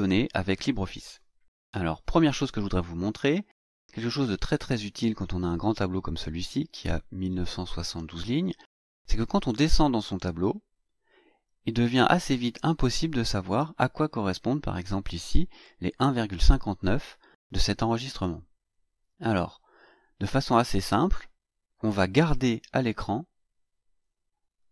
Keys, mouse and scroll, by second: 9.5-9.9 scroll down 2, 10.3-10.7 scroll down 2, 11.3 scroll down 2, 13.2 click, 20.6-21.1 scroll up 2, 21.4-21.7 scroll up 2, 22.0 scroll up 2.